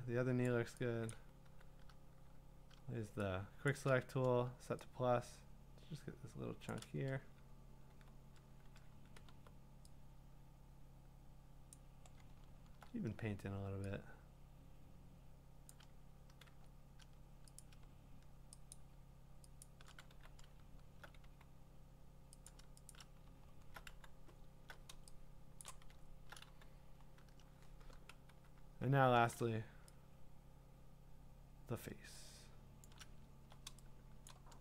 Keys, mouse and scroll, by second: 0.5 click, 1.1 click, 1.5 w, 3.7-4.1 shift+click, 6.7 shift+click, 10.6-11.3 typing, 11.7 click, 12.3 scroll, 13.1-15.3 scroll, 15.7 click, 16.4 x, 17.6 click, 18.7 shift+click, 19.6 shift+click, 22.9 alt+click, 23.4-24.1 scroll, 23.9 q, 25.6 click, 26.0 scroll, 26.4 q, 27.4-27.8 scroll, 28.3-29.3 typing, 32.8 shift+click, 33.8 shift+click.